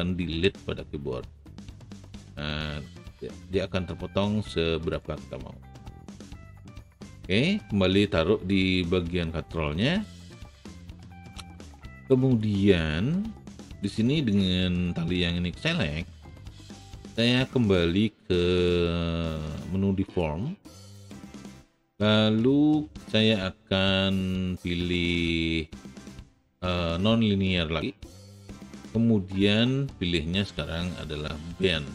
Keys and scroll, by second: 0.4 Delete.